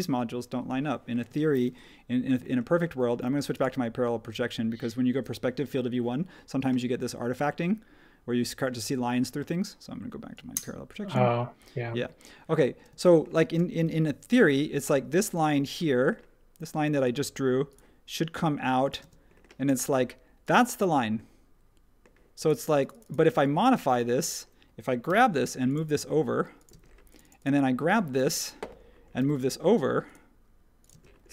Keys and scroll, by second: 1.2 space, 12.9 space, 17.0 super+z, 19.0 space, 25.0 m, 26.7 space, 29.2 m, 30.9 space.